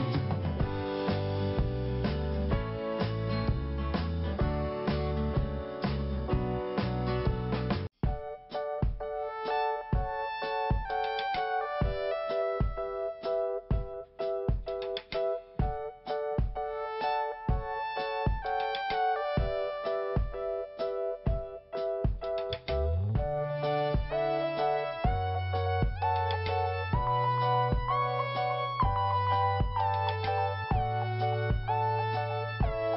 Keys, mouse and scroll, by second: 0.4 click, 0.5 click, 0.7 click, 0.8 double click, 1.2 double click, 1.3 double click, 1.3 double click, 1.4 double click, 1.5 double click, 1.6 double click, 1.6 double click, 1.7 double click, 1.8 double click, 1.9 double click, 2.0 double click, 2.1 double click, 2.2 double click, 2.5 double click, 2.6 double click, 2.6 double click, 2.7 double click, 2.8 double click, 2.9 double click, 3.0 double click, 3.1 double click, 3.2 double click, 3.3 double click, 3.4 double click, 3.5 double click, 3.6 double click, 3.7 double click, 3.7 double click, 5.2 click, 5.3 click, 5.6 click, 5.7 double click, 5.9 double click, 6.0 double click, 6.2 double click, 6.5 click, 6.6 click, 6.7 click, 6.8 double click, 6.9 double click, 7.1 double click, 7.2 double click, 7.3 double click, 8.0 click, 8.1 click, 9.5 scroll up 1, 11.0 click, 11.1 click, 11.7 click, 11.8 click, 12.4 click, 12.5 click, 13.4 click, 13.7 click, 14.7 click, 14.7 click, 15.9 click, 16.0 click, 16.8 click, 18.4 scroll up 1, 19.5 click, 21.0 scroll up 1, 21.7 scroll down 1, 22.4 scroll up 1, 24.0 click, 24.0 click, 25.8 click, 25.9 click, 27.2 click, 27.3 click, 28.2 click, 30.4 click, 30.5 click, 31.3 click, 32.3 scroll down 1.